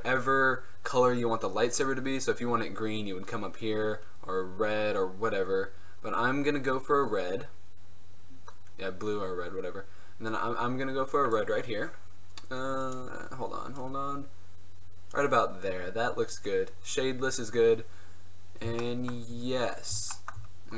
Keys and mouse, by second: 12.0-13.0 middle drag, 13.0-14.8 drag, 15.5-17.8 middle drag, 18.2-20.3 middle drag, 20.3-20.7 drag.